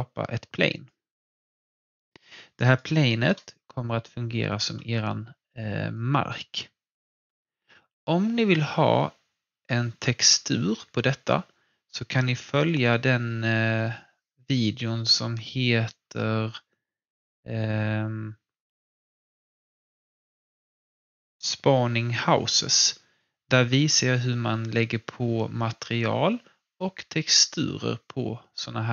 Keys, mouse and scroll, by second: 0.7 click, 3.6-5.6 scroll up 1.